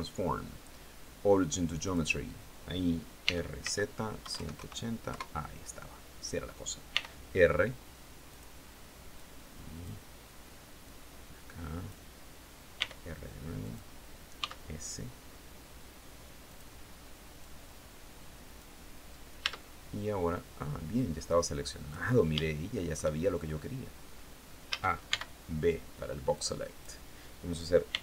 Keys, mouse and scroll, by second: 1.3 click, 2.7-4.0 typing, 4.5 KP_Enter, 6.3 r, 7.7 click, 8.6 click, 10.3-11.5 drag, 12.2 r, 13.1 click, 13.8 s, 15.9 click, 16.8-18.2 drag, 18.9 Tab, 20.4-21.5 drag, 21.9 shift+middle click, 22.7-23.1 shift+scroll up 1, 24.1 a, 24.5 b, 25.8 click, 27.3 r.